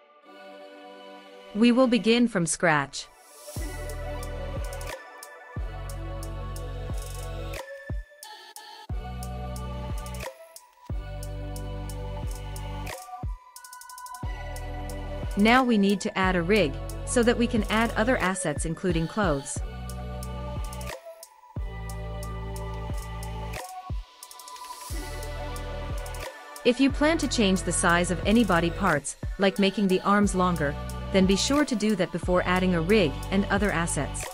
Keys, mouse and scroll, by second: 1.6-3.7 drag, 6.6 click, 8.1-8.8 shift+middle drag, 9.5-10.2 shift+middle drag, 13.5 middle click, 17.6 middle click, 19.3-21.6 middle drag, 23.1-24.5 right drag, 29.4 click, 32.0 click.